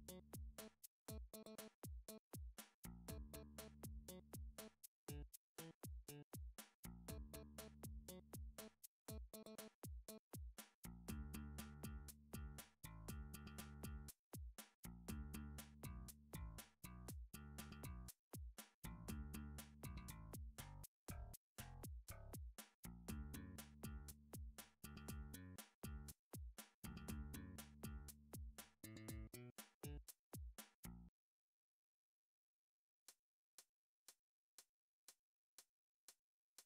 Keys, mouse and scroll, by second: 0.6 click, 1.5 s, 2.0 y, 3.8 click, 4.5 middle click, 4.8 3, 5.4 middle click, 5.5 middle click, 6.0 scroll, 6.9 middle click, 7.0 middle click, 8.3 alt+click, 9.6 x, 10.7 click, 11.4 q, 12.3 a, 13.2 7, 14.4 g, 15.6 x, 16.7 click, 17.0 3, 18.1 g, 18.5 z, 20.7 click, 22.2 middle click, 22.7 Tab, 23.4 click, 23.6 Tab, 25.2 middle click, 25.4 click, 25.8 shift+click, 26.8 middle click, 27.4 shift+click, 28.9 middle click, 29.3 g, 29.5 z, 30.8 click, 31.1 click, 31.2 shift+click, 32.1 shift+click, 32.3 shift+click, 33.9 g, 34.2 z, 34.3 g, 35.8 click, 36.5 middle click.